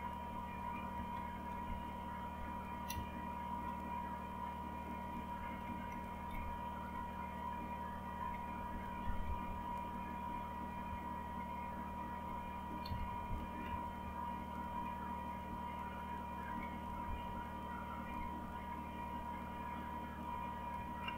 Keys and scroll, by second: 0.4 Right, 0.6 Right, 0.9 Right, 1.0 Right, 1.6-2.2 Left, 2.9 Right, 3.4 Right, 3.5 Right, 5.0 Down, 5.6 Right, 5.8-7.7 typing, 6.2 Up, 6.8-7.7 Down, 10.9 Up, 11.3-11.8 Up, 12.2 Up, 12.8 Down, 13.0 Down, 13.6 Right, 14.5 Right, 15.5-18.4 Down, 18.9 Down, 18.9 typing, 21.0-21.1 typing.